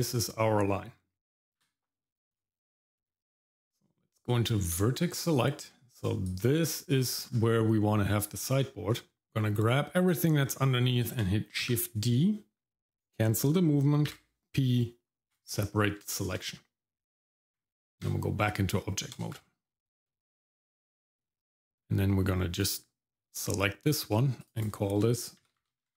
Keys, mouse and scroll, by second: 1.1 x, 1.6 w, 2.3 click, 3.1 Tab, 5.3 click, 6.2 click, 6.9-8.5 scroll down 2, 8.5-9.2 scroll up 3, 9.2 click, 9.2 shift+middle click, 10.4-10.7 scroll up 1, 11.6 shift+d, 14.1 p, 16.1 shift+middle click, 17.6 Tab, 18.4-19.1 scroll down 1, 19.3 shift+z, 22.5 click, 24.4 click, 24.6-25.9 drag.